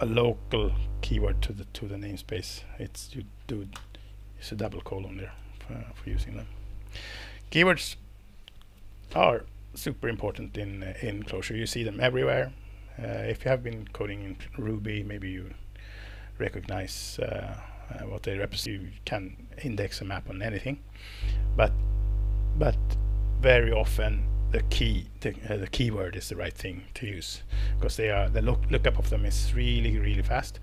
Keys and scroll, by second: 3.7 ctrl+Return, 5.4 Escape.